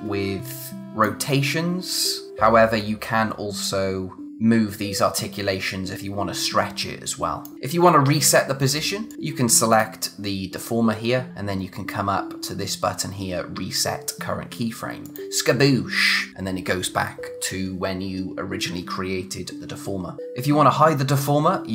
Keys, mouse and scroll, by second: 3.6 click, 9.1 click, 15.0 click.